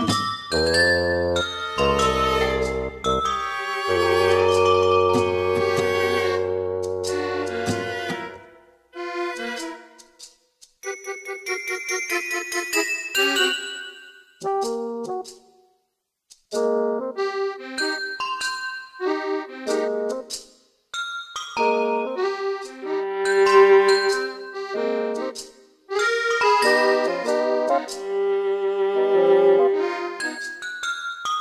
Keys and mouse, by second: 0.3 middle click, 0.6 middle click, 0.9 middle click, 1.3 middle click, 1.8 middle click, 3.6 middle click, 14.3 right click, 15.2 right click, 16.0 middle click, 17.3 middle click, 17.8 middle click, 18.9 middle click.